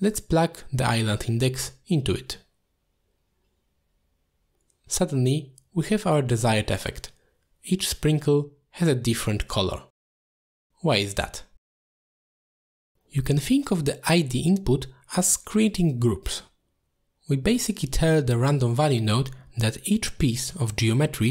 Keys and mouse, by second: 3.9 middle click, 5.4-6.3 drag, 8.3 middle drag, 8.8 shift+middle drag, 9.8 click, 10.7-11.4 middle drag, 11.7-12.1 shift+middle drag, 16.2-16.7 middle drag, 17.1-17.5 shift+middle drag, 18.4-18.9 middle drag, 19.3 shift+middle drag, 20.0-20.3 middle drag, 20.7 shift+middle drag, 21.1 middle drag.